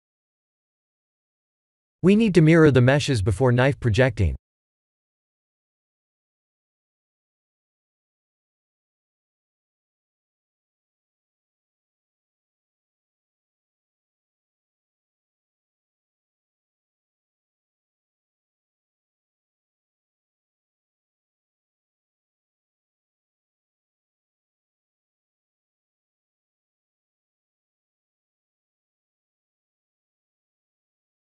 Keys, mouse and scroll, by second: 5.4 click, 6.9 click, 9.4 click, 9.9 click, 10.6 click, 12.9 click, 15.1 click, 17.5 click, 20.2 click, 20.5 click, 20.9 click, 21.6 click, 22.6 click, 23.9 ctrl+a, 24.1 ctrl+a, 25.4 click, 25.8 click, 26.7 ctrl+a, 26.9 ctrl+a, 28.1 click, 29.2 ctrl+a, 29.4 ctrl+a, 31.1-31.3 scroll up 4.